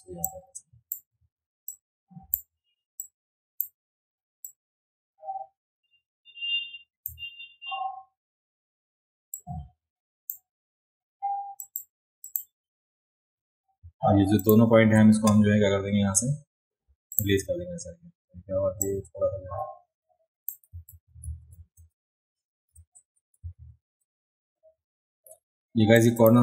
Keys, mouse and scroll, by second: 0.2 click, 1.7 click, 3.0 click, 4.5-7.1 drag, 9.3 click, 11.6 click, 12.2 click, 14.4 shift+click, 17.1 click, 18.8-20.5 drag, 20.9 ctrl+z, 21.2 ctrl+z, 21.6 ctrl+z, 21.8 ctrl+z, 22.7 ctrl+z, 23.6 ctrl+z, 26.0 click.